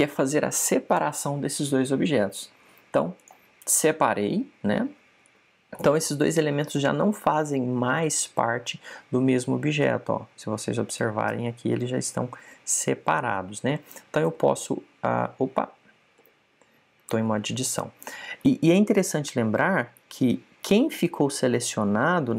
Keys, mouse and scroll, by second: 15.1 g, 17.1 g, 17.9 Tab.